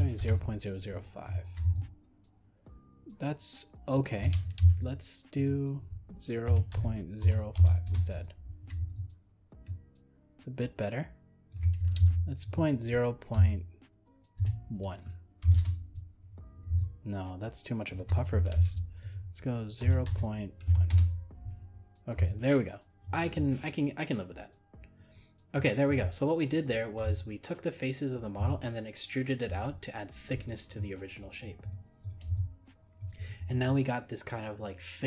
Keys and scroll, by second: 4.6 ctrl+z, 12.0 ctrl+z, 18.6 ctrl+z.